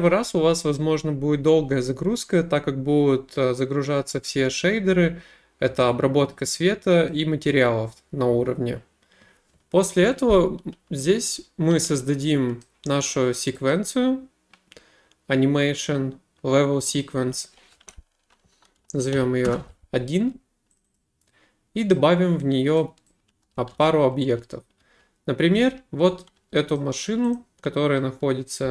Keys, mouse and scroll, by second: 7.1 middle click, 10.8 w, 11.3 w, 12.6 middle click, 13.5 click, 13.7 middle click, 17.0 click, 19.2 typing, 19.5 Return, 20.8 click, 21.0 click, 22.8 click, 23.2-26.5 typing, 26.8 middle click, 27.4 click, 28.4-28.7 typing.